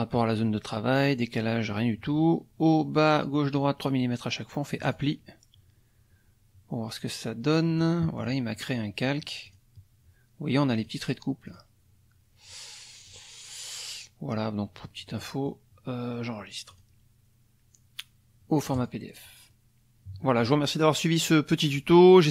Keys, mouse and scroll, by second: 4.8 click, 7.8 click, 8.2 click, 9.4 click, 10.8 click, 11.5 click, 13.1 click, 15.2 click, 16.7 click, 18.7 click, 20.2 click.